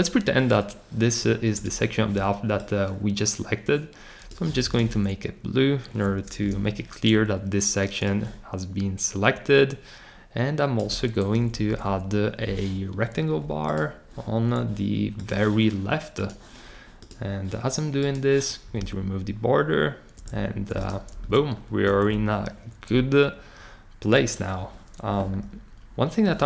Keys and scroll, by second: 6.4 r, 11.5 Up.